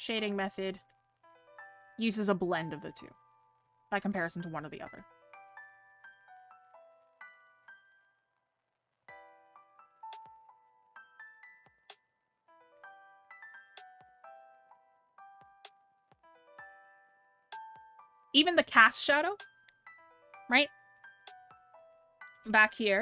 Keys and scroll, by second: 18.5 scroll down 1, 19.7 scroll up 1.